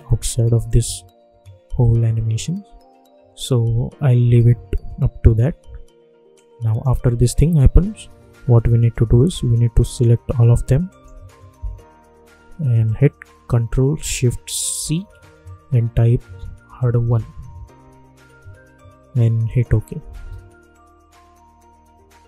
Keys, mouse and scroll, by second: 6.3-9.8 drag, 10.8 shift+click, 14.7 ctrl+shift+c, 16.3-17.6 typing, 19.4 click, 20.1 space.